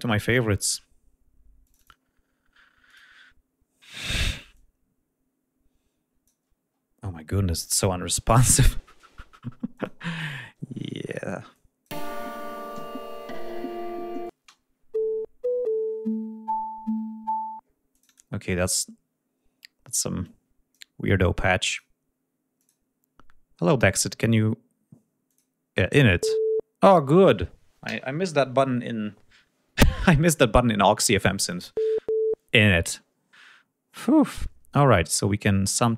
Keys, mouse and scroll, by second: 1.7 click, 2.9 click, 9.8 click, 11.1 click, 11.6-17.1 drag, 18.0-19.9 drag, 20.3 click, 21.7 click, 22.6 click, 25.3 click.